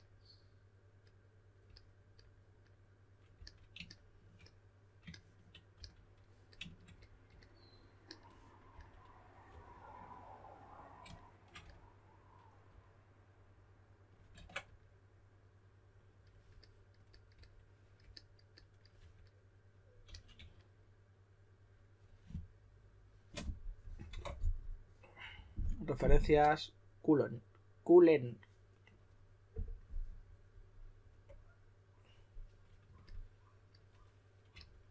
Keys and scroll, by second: 3.3 s, 5.7 s, 8.7-9.9 typing, 11.5 s, 14.3 super+z, 18.9 typing, 20.0 typing, 34.5-34.9 typing.